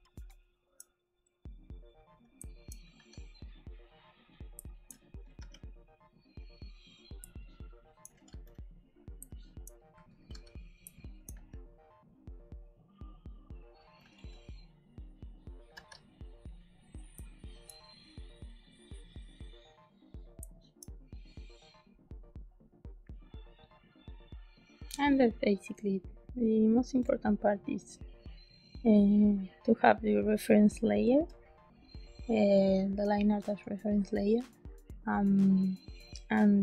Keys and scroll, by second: 2.3 space, 2.9 b, 4.5 space, 5.3 z, 7.1 space, 8.2 g, 9.1 space, 10.2 g, 10.8 space, 11.2 b, 13.9 g, 15.6 b, 17.1 space, 20.3 space.